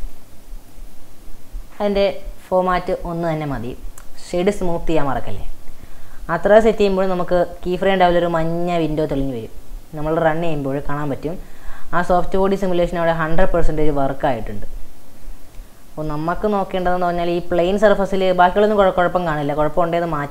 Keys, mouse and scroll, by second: 0.3-1.5 drag, 4.1-6.8 right drag, 6.8-9.5 drag, 9.5 space, 15.8-16.3 scroll down 3, 16.4-20.3 shift+middle drag.